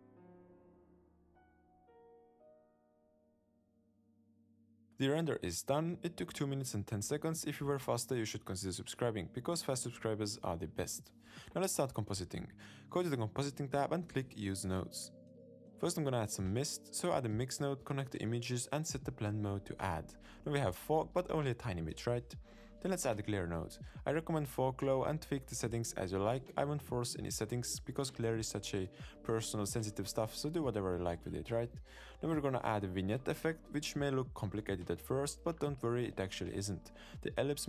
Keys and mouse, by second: 11.9 z, 13.3 z, 15.0 click, 16.7 shift+a, 18.5 click, 19.3-20.3 drag, 20.7 ctrl+shift+click, 21.2-22.8 drag, 23.1 shift+a, 24.9 click, 24.9 middle click, 25.1 click, 25.4 click, 25.9 middle click, 27.1 click, 27.2 middle click, 27.7 click, 28.1 click, 28.2 click, 28.3 middle click, 28.4 click, 28.5 click, 28.7 click, 28.8 click, 29.0 middle click, 29.3 middle click, 30.0 middle click, 30.1 middle click, 30.2 middle click, 30.4 middle click, 30.6 middle click, 30.7 click, 31.6 click, 32.7 middle click, 32.9 click, 33.9 shift+a, 33.9 l, 34.1 shift+a, 34.7 click, 35.0 click, 35.0 shift+a, 35.6 click, 35.7 click, 36.3 click, 37.0 click.